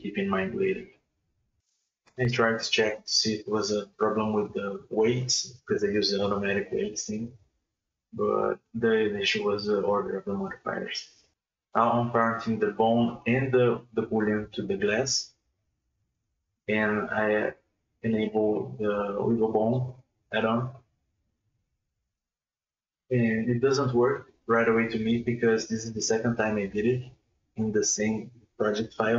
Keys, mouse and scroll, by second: 0.3 alt+r, 1.4 click, 1.8-2.9 shift+middle drag, 2.9 right click, 3.2 right click, 6.6 ctrl+click, 8.6 ctrl+click, 9.5 ctrl+p, 12.0 click, 12.5 click, 12.9-14.0 scroll down 5, 14.0 drag, 14.2-14.9 scroll down 5, 14.9 click, 15.4 space, 15.6 right click, 15.9 g, 16.5 space, 16.8 right click, 17.0 right click, 17.2 right click, 17.3 right click, 17.6 right click, 17.8 right click, 18.3 click, 18.9-19.7 scroll down 2, 19.7 middle click, 19.9 space, 20.1 right click, 20.3 middle click, 20.5 g, 21.8 space, 22.0 right click, 22.1 right click, 22.3 right click, 22.4 right click, 22.5 right click, 22.8 right click, 23.0 right click, 23.2 right click, 23.5 r, 24.2 ctrl+z, 24.7 space, 25.2 g, 26.0 ctrl+z, 26.3 space, 26.7 right click, 26.9 g, 28.3 space, 28.5 g.